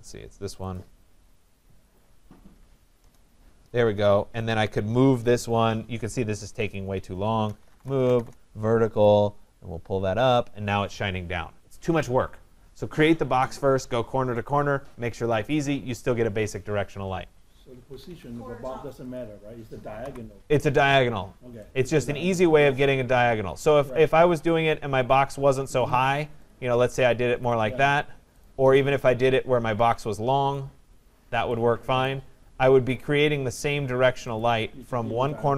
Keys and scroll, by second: 2.6 Return, 17.5 Escape, 19.6 Delete.